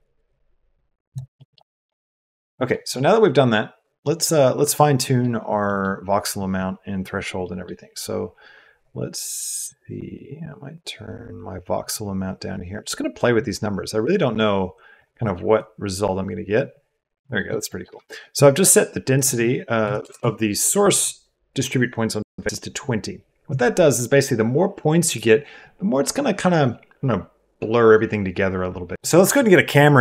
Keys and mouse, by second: 1.3 click, 2.3 click, 3.0 click, 4.1 click, 5.8 click, 7.5 click, 7.6 middle click, 9.7 click, 10.1 middle click, 10.3-14.6 drag, 14.8 click, 15.5-17.1 drag, 17.4 shift+click, 17.6 click, 18.1 click, 19.1-20.2 drag.